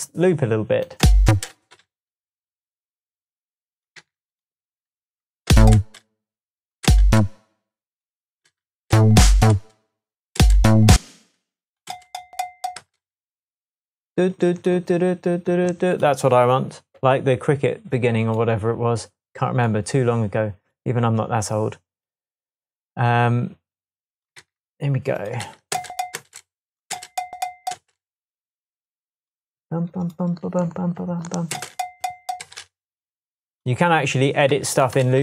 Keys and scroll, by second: 1.0 space, 4.0 super+c, 5.5 super+space, 6.9 space, 8.9 space, 11.9 space, 12.8 space, 24.4 c, 25.4 v, 25.7 space, 26.9 space, 27.7 space, 31.5 space, 34.5 super+c, 35.0 super+v.